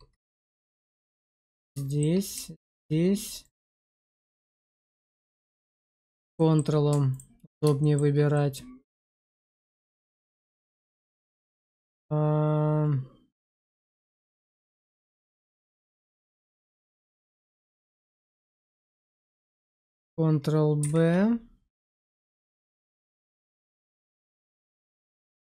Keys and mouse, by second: 1.3 middle click, 1.8 shift+middle click, 4.7 middle click, 5.2 shift+middle click, 5.9 ctrl+click, 6.2 shift+middle click, 7.7 shift+middle click, 8.2-15.6 middle drag, 18.1 shift+middle click, 19.4 middle click, 20.7 ctrl+b.